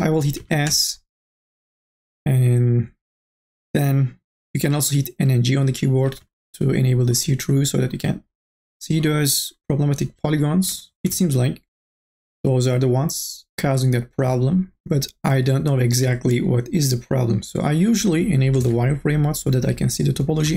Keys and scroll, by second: 0.4 s, 5.5 n, 5.9 g, 10.6 n, 10.9 b, 18.5 n, 18.9 b.